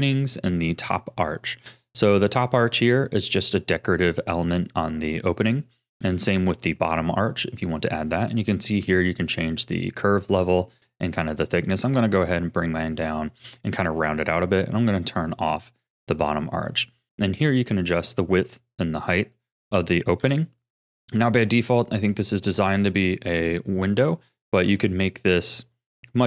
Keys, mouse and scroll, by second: 2.6 click, 5.2 click, 6.1 click, 10.0-13.1 drag, 15.0 click, 18.9-19.3 scroll down 3, 19.3-20.2 middle drag, 20.2 KP_1, 21.6-24.5 scroll up 2, 24.5-26.2 drag.